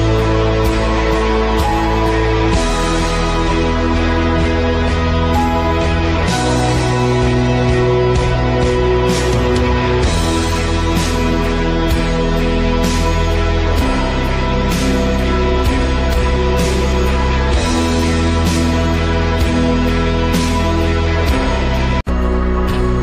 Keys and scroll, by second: 4.3 z.